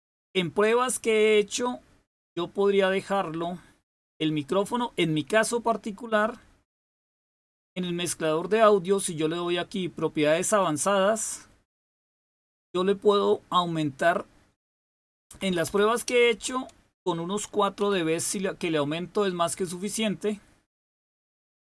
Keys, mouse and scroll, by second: 8.2 right click, 10.6 click, 14.0 click, 15.1 Left, 15.3 Left, 15.4 Left, 15.6 Left, 16.3 Delete, 17.8 4.